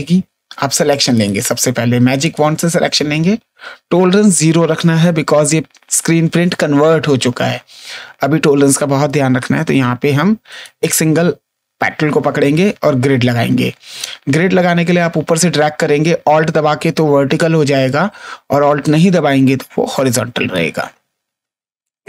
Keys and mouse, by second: 1.1 right click, 2.2 click, 10.4 click, 15.4 click, 18.8 click.